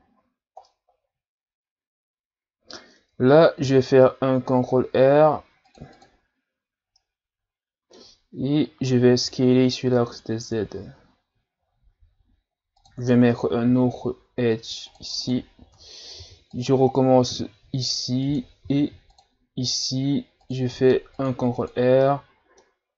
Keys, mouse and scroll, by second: 0.0-0.5 shift+scroll up 1, 0.7-3.6 middle drag, 3.6 ctrl+r, 7.0-8.3 middle drag, 8.3-8.8 scroll up 1, 8.8 s, 13.7 ctrl+r, 16.2 ctrl+r, 22.0-22.9 middle drag.